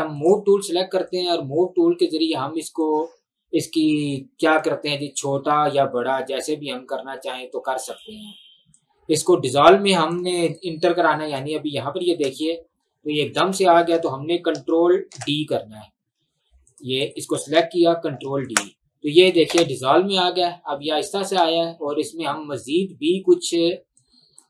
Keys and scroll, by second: 12.1 space, 13.5 space, 15.1 ctrl+d, 18.2 ctrl+d, 19.6 space, 21.5 space.